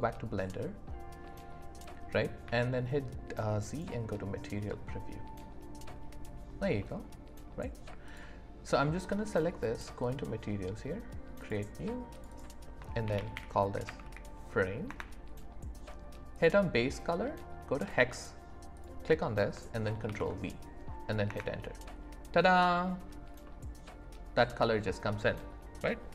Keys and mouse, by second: 1.2 click, 1.2 right click, 2.4 z, 4.7-6.0 drag, 4.7-6.0 right drag, 6.8 click, 6.8 right click, 8.1 click, 10.0 click, 11.4 click, 12.1 click, 12.4-14.9 drag, 23.4-26.1 drag, 23.4-26.1 right drag.